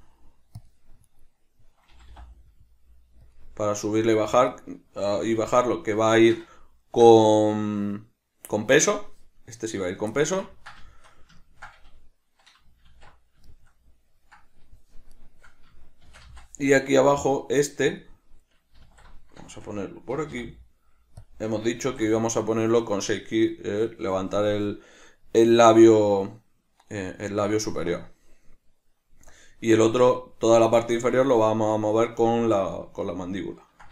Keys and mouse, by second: 0.7 click, 1.1 right click, 1.9 g, 3.3 click, 4.5 right click, 5.4 alt+q, 6.1-11.6 shift+middle drag, 12.8 alt+q, 13.4-15.1 shift+middle drag, 15.1 right click, 16.0 shift+d, 18.0 click, 18.9 alt+o, 19.5-21.3 shift+middle drag, 20.1 g, 21.3 click, 21.8 alt+q, 33.1-33.9 ctrl+middle drag.